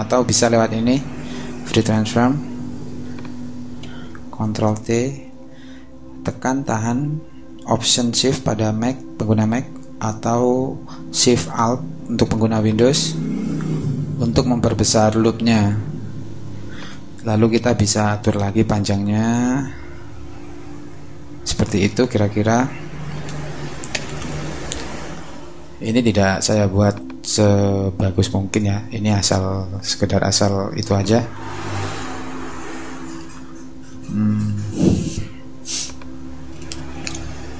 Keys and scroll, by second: 3.8 super+t, 24.0 Return, 31.8 shift+Down.